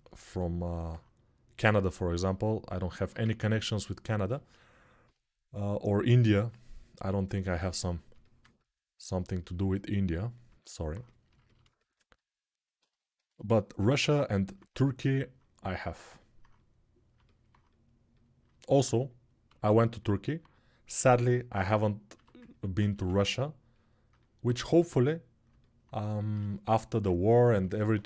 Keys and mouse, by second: 2.8-7.7 ctrl+alt+shift+drag, 7.9 alt+click, 8.2-12.5 ctrl+alt+drag, 13.6 alt+q, 16.6-22.3 drag.